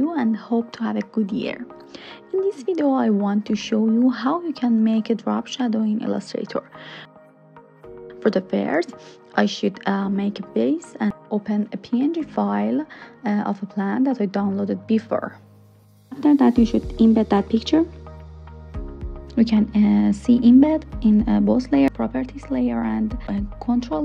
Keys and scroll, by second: 0.0-0.8 typing, 17.9 super+c.